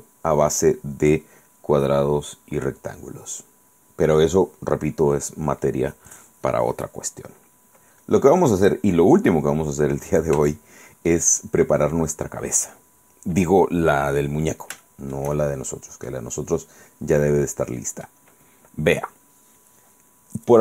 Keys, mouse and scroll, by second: 10.6 shift+middle click, 12.2 scroll down 2, 12.7-13.0 scroll up 2, 13.3-13.6 scroll down 2, 14.3 scroll down 2, 14.9-16.0 shift+middle drag, 16.0 scroll down 2, 16.4 scroll up 2, 17.2-18.4 middle drag.